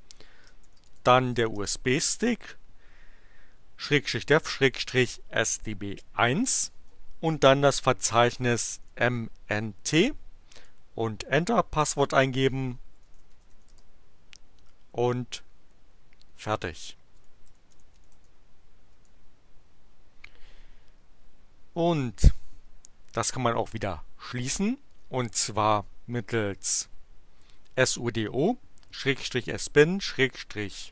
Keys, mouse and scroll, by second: 0.0-2.1 typing, 4.4-5.8 typing, 7.3-9.3 typing, 11.6-14.0 typing, 16.9-18.6 typing, 26.8 Up, 27.6 Up, 27.9 Left, 30.1 Left.